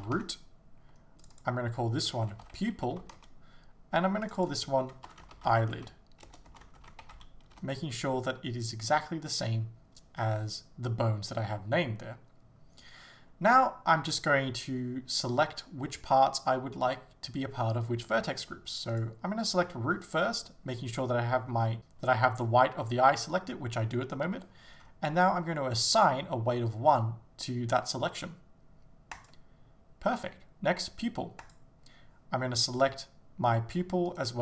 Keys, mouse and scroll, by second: 0.3 Return, 3.3 Return, 9.9 Return, 29.3-31.5 drag, 32.9 right click, 34.1 shift+right click.